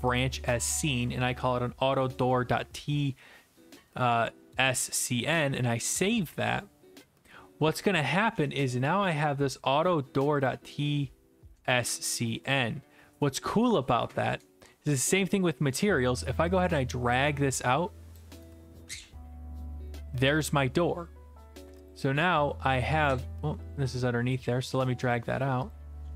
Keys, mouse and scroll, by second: 0.2 click, 5.4 click, 8.3 right click, 8.7-10.5 scroll down 10, 10.5 click, 13.5-15.4 typing, 15.7-18.1 right drag, 18.1-19.3 drag, 19.0-20.0 typing, 19.8 right click, 20.4 click, 21.9 click, 24.3 click, 25.1 click, 25.7 click.